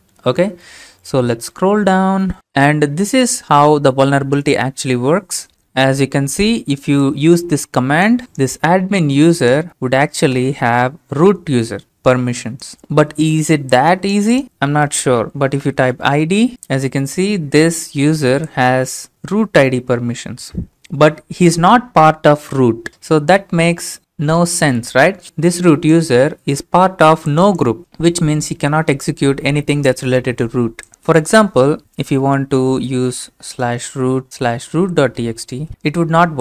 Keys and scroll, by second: 8.2 alt+Tab, 10.3 Return, 15.3-16.1 typing, 30.9-32.2 typing, 33.2-36.2 typing.